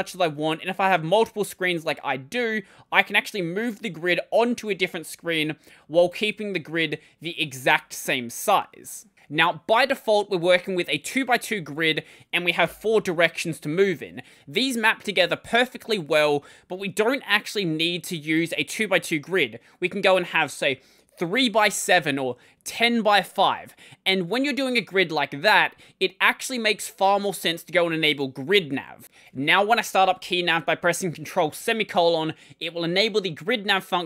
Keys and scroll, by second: 0.0-0.2 typing, 2.2 h, 4.6 l, 5.0 l, 5.6 h, 6.0 l, 12.5 ctrl+;.